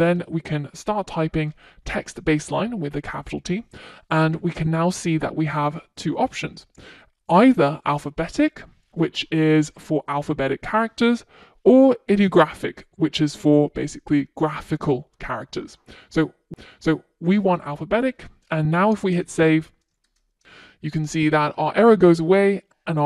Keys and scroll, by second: 0.6 Return, 20.1 super+s, 22.2 super+s.